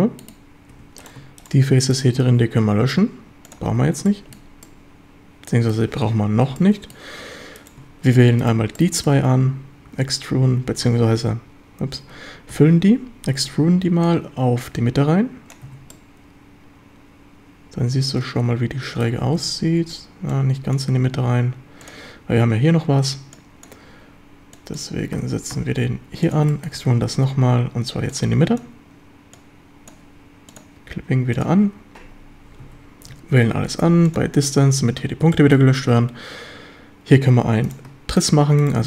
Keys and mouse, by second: 0.8 3, 2.3 x, 3.7 1, 4.1 shift+drag, 4.7-5.8 drag, 6.6-7.0 drag, 8.8-9.2 shift+drag, 10.5 Escape, 11.1 ctrl+z, 12.6 f, 13.5 Escape, 14.1-15.6 drag, 15.7 a, 15.9-18.8 drag, 18.8 middle click, 19.4 ctrl+z, 20.4 click, 21.9 click, 23.4 click, 24.6 click, 25.2 g, 25.6 x, 26.3 ctrl+click, 26.5 shift+click, 26.8 e, 27.1 Escape, 28.2 click, 29.4 click, 31.4 drag, 32.7 a, 33.1 a, 33.5 q, 34.4 a, 35.4 shift+drag.